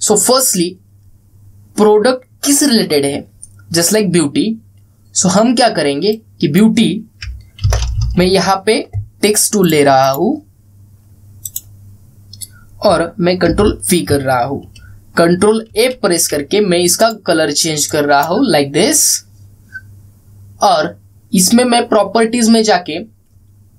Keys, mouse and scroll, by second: 6.8-7.4 drag, 8.3 ctrl+c, 10.3 click, 14.1 ctrl+v, 16.4 ctrl+a, 17.7 click, 22.5-23.3 scroll down 1.